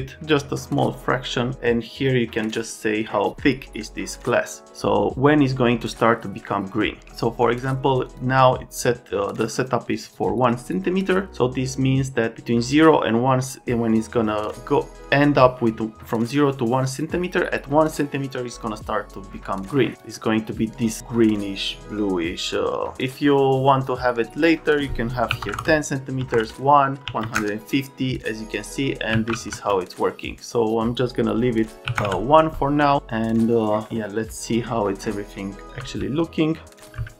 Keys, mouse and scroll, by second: 0.9 click, 1.8 click, 7.9 click, 8.1 click, 9.9 click, 19.9 click, 23.0 click, 24.2 click, 24.4 click, 25.3-27.2 typing, 26.3 KP_Enter, 27.3 KP_Enter, 29.1 KP_1, 29.2 KP_0, 29.5 KP_Enter, 31.9 KP_1, 32.0 KP_Enter, 35.7 x.